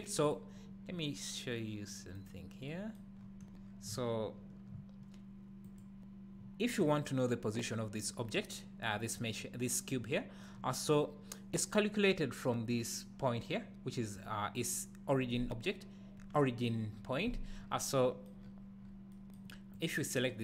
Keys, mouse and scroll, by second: 0.2 click, 2.1 click, 3.3-3.6 scroll up 1, 3.6 scroll down 1, 3.9 `, 5.6 click, 10.5 scroll up 1, 17.6 scroll down 1, 18.4 scroll down 1, 18.8 scroll up 1, 19.7 click.